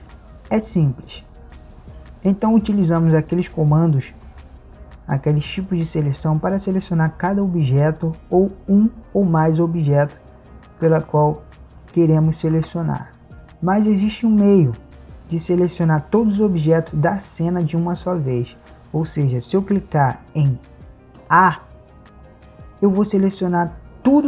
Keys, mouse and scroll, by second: 21.3 a.